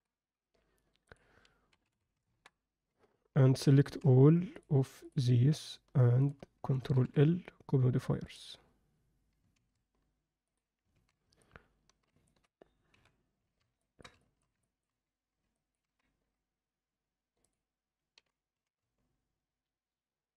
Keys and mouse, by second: 1.1-2.3 drag, 3.8 click, 5.5 shift+drag, 6.9 ctrl+l, 9.5 ctrl+a, 10.9 alt+a, 11.4-12.1 alt+middle drag, 12.3 ctrl+middle click, 12.9 KP_7, 13.8 ctrl+alt+middle drag, 14.2 alt+shift+middle click, 14.6 ctrl+middle click, 15.5 ctrl+middle click, 17.5 drag, 18.1 g.